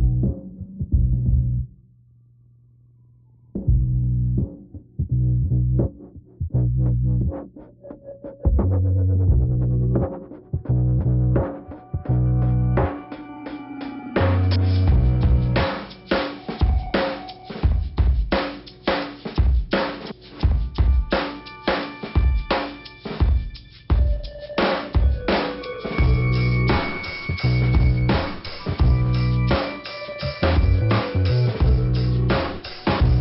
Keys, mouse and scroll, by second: 5.3 scroll down 3, 6.0 click, 6.8 click, 9.4 click, 11.3 click, 12.4 click, 13.2 click, 14.1 click, 14.5 click, 15.1 click, 16.3 click, 16.8 click, 17.2 scroll down 2, 22.9-23.6 scroll down 1, 23.7 click, 27.2 click, 32.7-33.1 scroll up 3.